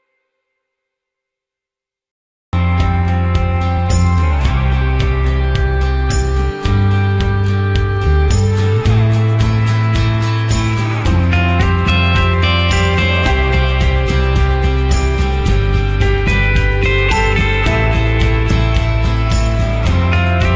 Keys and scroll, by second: 0.7 ctrl+0.